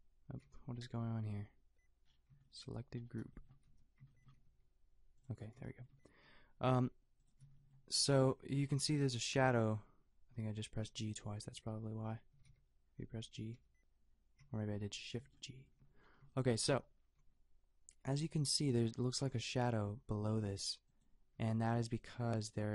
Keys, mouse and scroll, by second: 0.4 shift+g, 3.6 n, 4.4 g, 6.2 g, 7.9 shift+g, 8.7 shift+g, 11.2 shift+g, 12.3 shift+g, 12.5 shift+g, 13.5 shift+g, 17.2 g, 21.4 g.